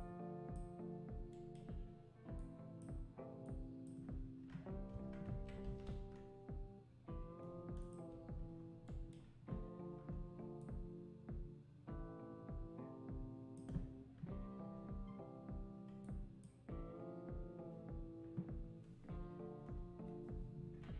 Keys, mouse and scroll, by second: 2.4-4.9 drag, 4.9 Tab, 5.7 s, 8.1 Tab, 10.6-13.6 drag, 16.0-19.1 drag.